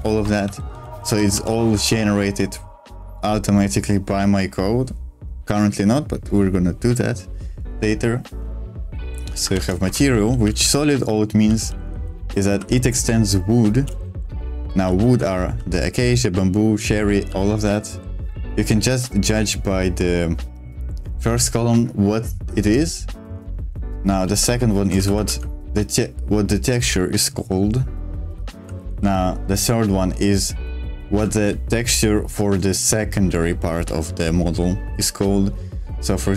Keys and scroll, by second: 0.2-2.2 typing, 9.5-18.2 typing, 9.8 Escape, 22.7-25.7 typing, 28.3 w, 28.7 w, 28.9 w.